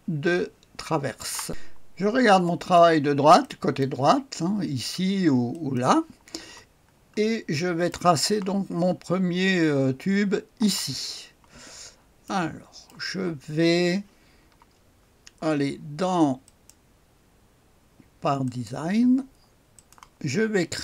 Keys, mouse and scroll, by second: 1.5 click, 2.4 click, 3.4 click, 3.4 right click, 5.5 click, 6.9-7.5 scroll up 1, 7.5 right click, 11.0-12.2 scroll up 2, 12.2 click, 12.2-13.6 right drag, 16.4 click, 18.4 click, 19.7 click, 20.4-20.8 scroll down 1.